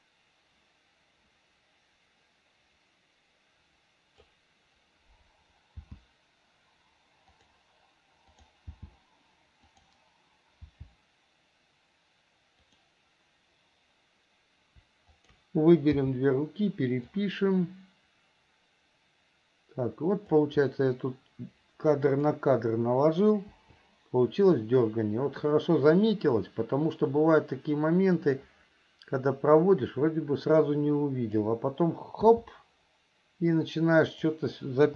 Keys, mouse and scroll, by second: 8.6 click, 15.4 shift+click, 17.4-20.6 drag, 22.2 click, 24.9-31.7 drag, 34.4 click.